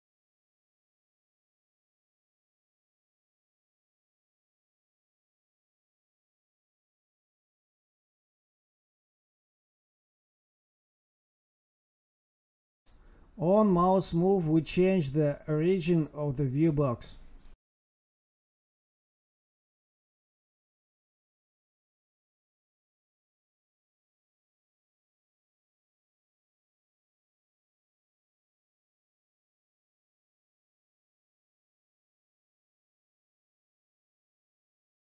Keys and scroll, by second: 0.3 alt+shift+Down, 0.4 Left, 2.2 Escape, 2.3 Right, 2.8 Right, 3.5 Escape, 3.9 End, 4.1 Left, 4.9 Escape, 5.5 ctrl+s, 16.7 space, 16.8 space, 17.6 Right, 17.7 space, 18.7 Right, 19.1 Left, 20.1 Escape, 20.4 Left, 20.6 space, 22.3 Tab, 22.6 Right, 22.7 space, 23.7 Tab, 24.2 Escape, 24.3 Down, 26.6 space, 27.9 space, 28.0 space, 30.7 Up, 30.9 Tab, 31.2 space, 31.7 space, 32.9 Tab, 33.1 Right, 33.2 space, 33.5 space.